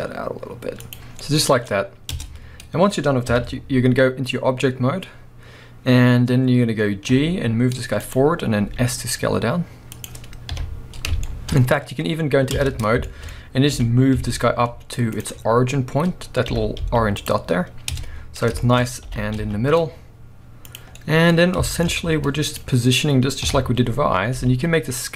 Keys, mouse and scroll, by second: 0.9 click, 1.1 scroll down 1, 1.2-3.3 middle drag, 2.1 Tab, 3.3 KP_3, 4.3-5.0 scroll up 1, 5.0-7.1 scroll down 1, 7.1 g, 8.1 click, 8.3-8.6 scroll up 1, 8.6 s, 10.0 click, 10.5 KP_1, 11.2-12.5 shift+middle drag, 11.7-12.5 scroll up 2, 12.5 Tab, 13.1 shift+middle click, 13.3-13.7 scroll up 2, 13.7 g, 15.2 click, 15.4 scroll up 1, 16.5 g, 17.3 click, 17.9 Tab, 18.1-18.6 scroll down 1, 18.6-20.7 shift+middle drag, 19.0 g, 20.8 click, 20.9 scroll down 1, 21.5 scroll down 1, 21.6 shift+middle click, 21.9 scroll up 1, 22.1 z, 23.4 KP_3, 23.9-24.4 scroll up 1, 24.4 g, 24.6 middle click.